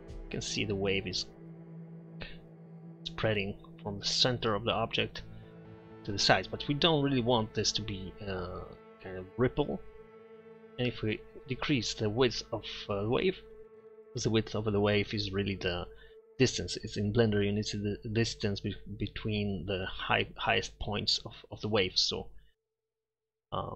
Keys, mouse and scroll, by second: 1.5 middle click, 2.1-2.6 middle drag, 2.6-4.0 drag, 4.8-6.5 middle drag, 6.9-9.4 middle drag, 13.2-14.8 middle drag, 15.9 middle click.